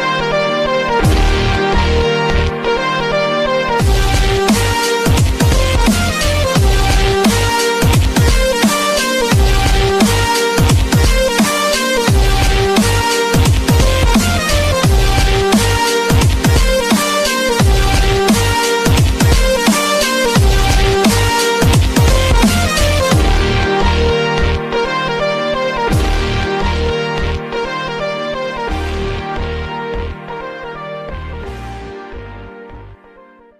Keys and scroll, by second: 0.0 super++, 2.6 super++, 3.8 super+e, 4.0 super+i, 6.1 super++, 6.3 super++, 8.5 super++, 12.8 super++, 15.1 super++, 23.2 super+i.